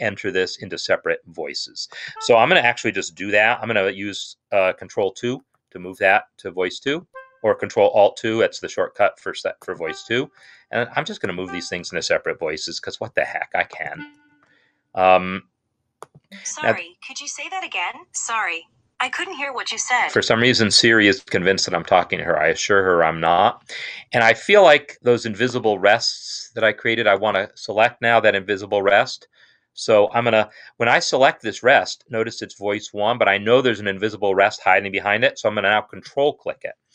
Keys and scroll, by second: 5.4 ctrl+alt+2, 8.3 ctrl+alt+2, 10.4 ctrl+alt+2, 11.9 ctrl+alt+2, 14.4 ctrl+alt+2, 16.9 ctrl+alt+2.